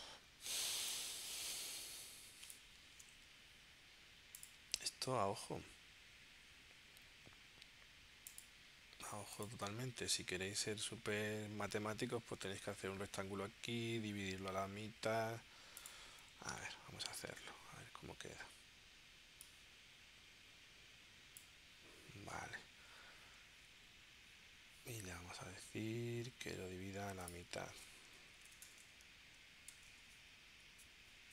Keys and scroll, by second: 1.2 space, 16.5 m, 28.5 BackSpace, 29.7 shift+7, 30.5 2.